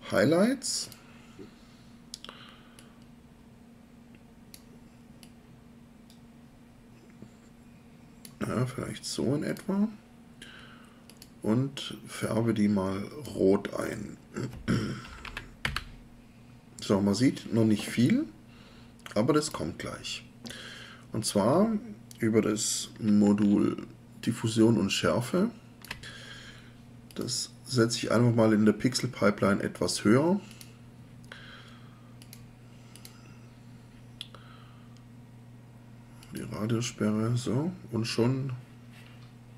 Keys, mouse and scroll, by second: 14.8-15.8 typing.